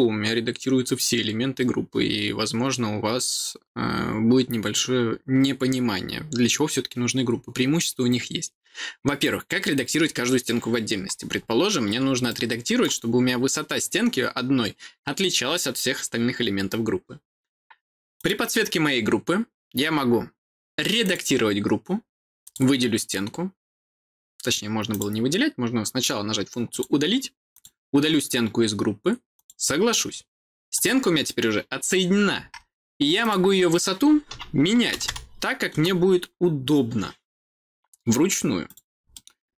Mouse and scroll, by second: 12.2 middle click, 18.1 click, 20.9 click, 22.3 click, 24.8 click, 26.6 click, 27.4 click, 29.2 click, 30.6 click, 33.1 click, 38.6 click, 39.0 middle click.